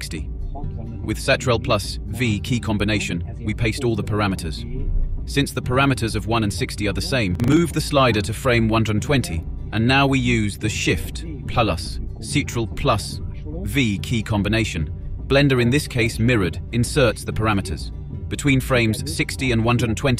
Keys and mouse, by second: 0.8-1.3 drag, 2.0 ctrl+v, 2.7-7.4 drag, 11.0 ctrl+shift+v, 12.3-18.2 drag.